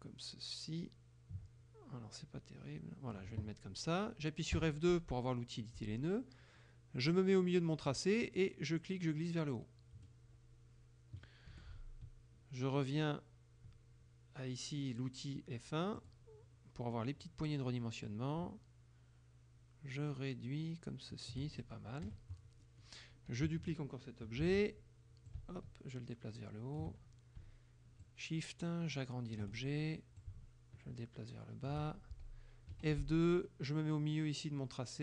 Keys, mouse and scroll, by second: 4.7 F2, 8.0-10.3 drag, 11.6 F1, 16.0 click, 18.1-21.4 drag, 22.1 KP_Subtract, 22.7 click, 24.5 ctrl+d, 25.3-27.0 ctrl+drag, 28.0-29.6 shift+drag, 30.2-31.9 shift+drag, 32.7 F2.